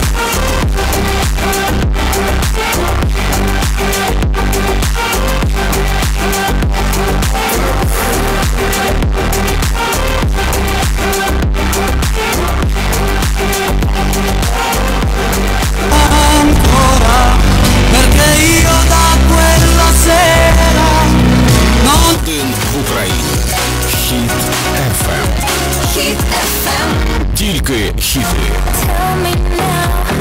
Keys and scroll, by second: 22.2 Page_Down.